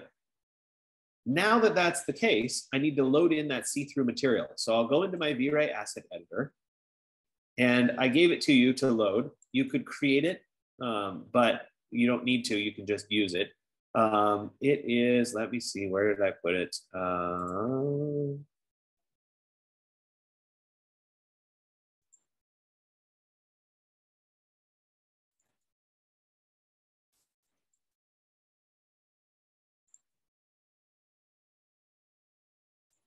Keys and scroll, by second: 11.6 F15.